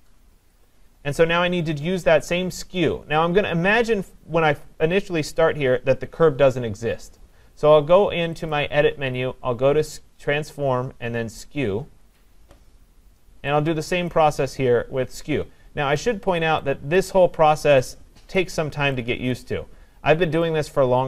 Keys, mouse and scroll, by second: 0.0-2.1 scroll, 0.5-5.6 click, 8.5 click, 12.2 click, 14.1 click, 16.0 click, 17.0 click, 18.4 click, 19.4 click.